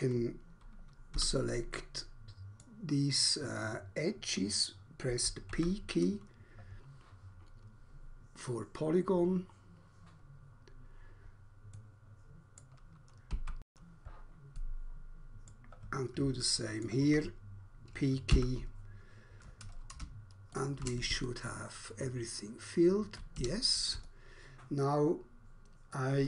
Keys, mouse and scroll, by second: 1.1 2, 1.8 middle click, 2.6 middle click, 5.5 p, 11.8 middle click, 12.3 middle click, 13.1 p, 14.6 middle click, 15.3 middle click, 16.4 shift+middle click, 18.3 p, 20.1 ctrl+space, 21.3 alt+click, 23.4 Escape.